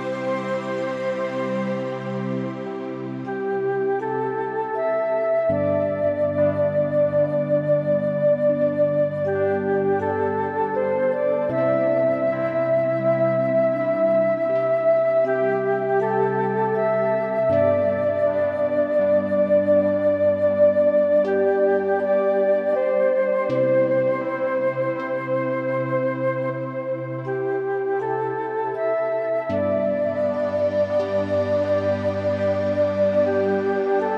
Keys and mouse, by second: 0.8-2.6 typing, 3.5 click, 3.8-5.4 middle drag, 5.9 g, 7.9 Escape, 8.3 `, 9.3 g, 10.4 Escape, 11.0 shift+click, 11.2 middle click, 12.8 middle click, 13.7 g, 14.0 z, 14.3 x, 15.4 y, 16.2 click, 16.5 g, 16.8 x, 17.1 z, 19.1 click, 19.6 middle click, 20.1 Tab, 20.3 click, 20.5 middle click, 22.1 shift+middle click, 22.4 click, 22.8 Tab, 23.0 middle click, 24.1 middle click, 24.8 middle click, 26.1 click, 26.5 shift+click, 26.9 shift+click, 27.8 g, 28.0 y, 29.3 Escape, 31.0 click, 31.6 shift+click, 33.1 g, 33.3 y.